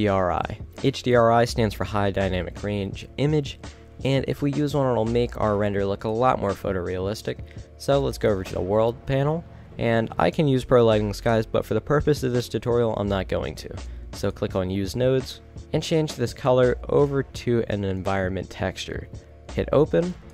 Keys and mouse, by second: 5.1 middle click, 8.3 middle click, 10.4-11.5 middle drag, 12.0-12.6 middle drag.